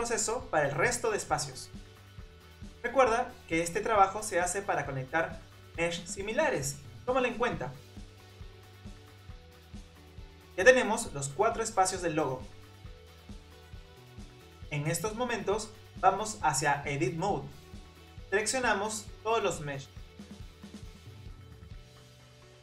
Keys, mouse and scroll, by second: 0.4 ctrl+j, 0.8 click, 1.8 ctrl+j, 2.2 click, 3.4 shift+click, 3.6 shift+click, 3.9 ctrl+j, 4.5 click, 5.1 click, 5.9 click, 6.3 shift+click, 7.0 ctrl+j, 7.9 click, 8.4 click, 8.8 click, 9.3 click, 9.7 click, 10.4 click, 10.7 click, 14.6 click, 15.5 Tab, 18.2 click, 19.0 shift+click, 20.0 shift+click, 20.8 shift+click, 21.2 middle click, 21.5-22.6 typing, 22.0 click, 22.3 scroll up 2.